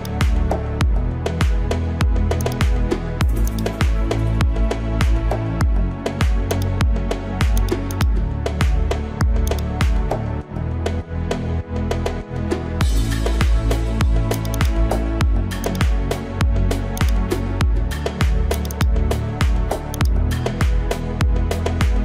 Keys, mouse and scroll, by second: 2.4 click, 3.5 alt+click, 6.5-21.1 drag.